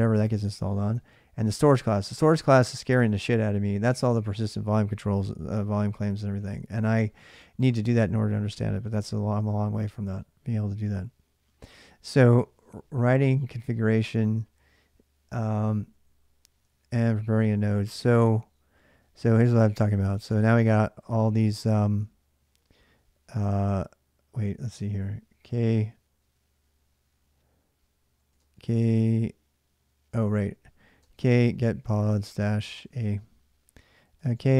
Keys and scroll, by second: 15.5 ctrl+a, 15.7 ctrl+a, 16.7 ctrl+a, 16.9-20.5 typing, 28.1 typing, 30.1-32.7 typing, 33.7-34.5 typing.